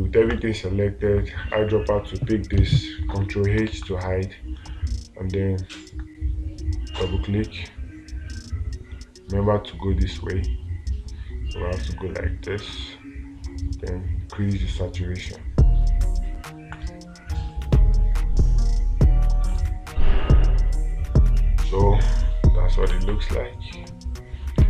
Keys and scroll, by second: 4.2 space, 18.2 space, 23.4 space.